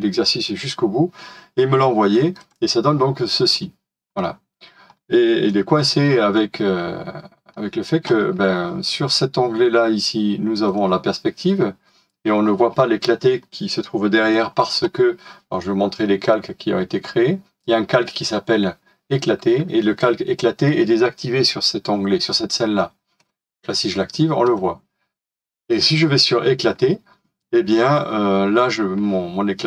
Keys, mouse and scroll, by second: 4.2-4.9 scroll down 1, 5.4 middle click.